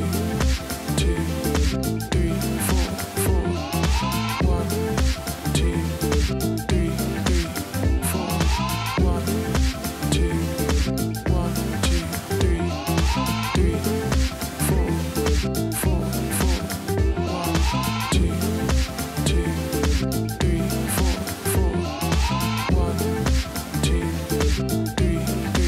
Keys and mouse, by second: 0.8 [, 4.0 click, 5.7 alt+Num_Lock, 10.1 ctrl+a, 10.6 Delete, 11.6 b, 12.3 d, 13.1 ctrl+z, 15.4 ctrl+z, 15.7 space, 15.9 click, 16.2 space, 16.7 space, 18.5 ctrl+z, 19.9 space, 20.1 click, 20.3 space, 21.4 z.